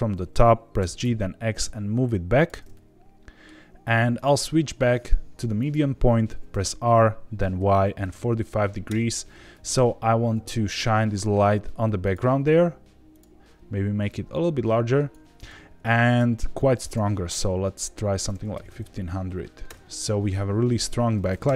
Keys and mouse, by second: 0.7 g, 1.0 x, 2.3 click, 2.7-3.4 middle drag, 4.2-5.7 drag, 6.5 r, 7.5 y, 8.0 KP_4, 8.1 KP_5, 8.8 KP_Enter, 9.5 g, 9.7 y, 10.3 x, 12.0 click, 12.3 g, 12.4 z, 13.1 click, 14.1 click, 16.1 click, 16.8-20.1 drag, 18.6 KP_0, 21.4 KP_0.